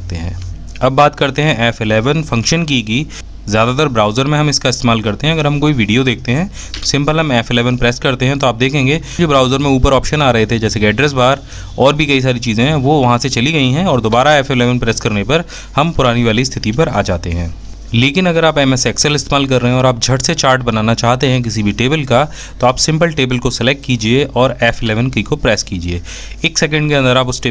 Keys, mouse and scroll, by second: 0.6 f, 1.4 F11, 14.8 f.